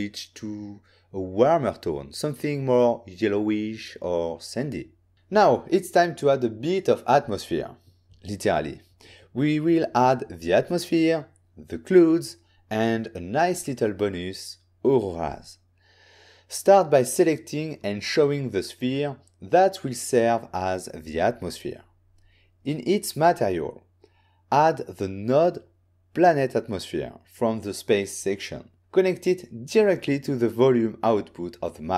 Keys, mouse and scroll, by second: 7.8 click, 8.1 click, 14.9 click, 15.3 click, 18.7 click, 20.2 n, 21.0 click, 23.0 click, 26.6 click, 29.0 n, 29.8 click, 30.9 click.